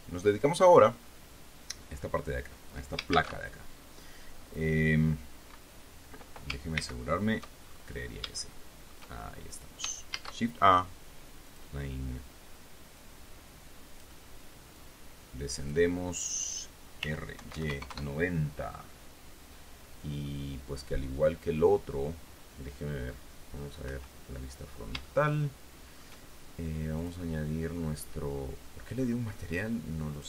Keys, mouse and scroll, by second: 3.5 shift+a, 7.1 shift+c, 8.0-8.5 shift+scroll up 3, 8.7 shift+middle click, 9.1-10.0 shift+scroll up 5, 10.5 shift+a, 11.8 click, 12.4 scroll down 2, 13.3-14.5 drag, 15.1-16.2 drag, 17.3 r, 17.7 y, 17.9 KP_9, 18.0 KP_0, 18.2 KP_Enter, 19.8 scroll down 2, 20.4 middle click, 24.2 KP_1, 25.4-26.5 shift+middle drag, 27.3 click.